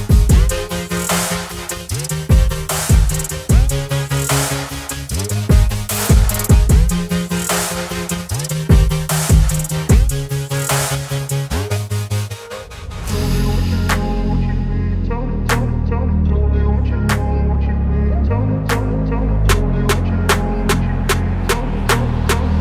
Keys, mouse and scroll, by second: 1.4 ctrl+t, 1.4-4.3 alt+drag, 6.5 ctrl+z, 8.1 click, 14.0 ctrl+t, 15.9-18.7 alt+drag.